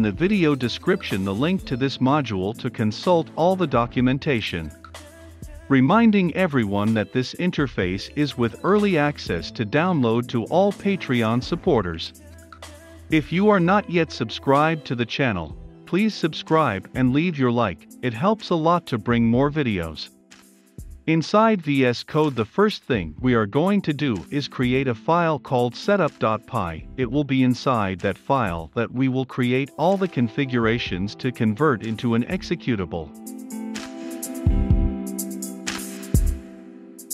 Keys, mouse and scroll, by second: 21.0-24.5 drag, 30.7-31.7 typing, 31.9 Return.